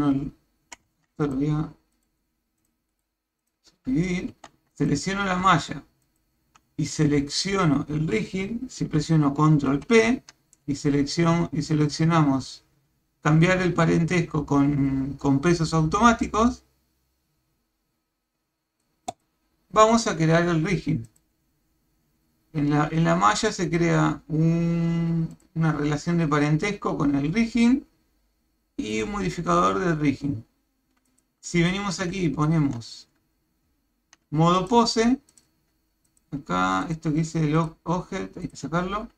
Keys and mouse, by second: 0.9 Tab, 1.2 click, 4.3 Tab, 4.7 click, 6.0 shift+click, 9.7 ctrl+p, 21.1 click, 23.6 click, 25.3 click, 28.9 click, 31.1 click, 32.1 ctrl+Tab, 34.6-35.5 drag, 36.2-37.0 drag, 37.6-38.6 drag.